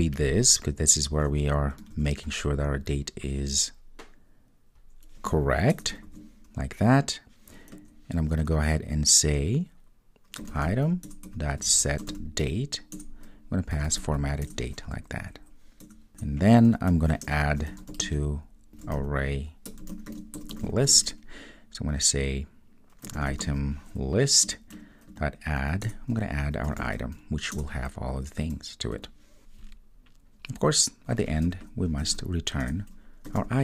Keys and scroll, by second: 1.9 super+c, 6.2 super+v, 11.1 Return, 24.6 Return, 25.9 Return, 27.5 Return, 32.7 Return.